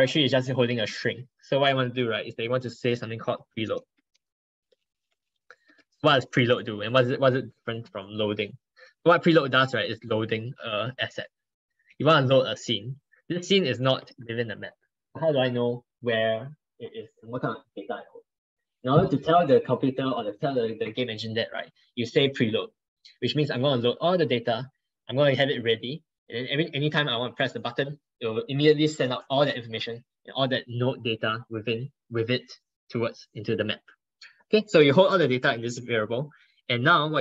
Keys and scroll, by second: 5.8 ctrl+Right, 6.1 ctrl+Right, 12.2 ctrl+Right, 12.3 ctrl+Right, 12.8 ctrl+Right.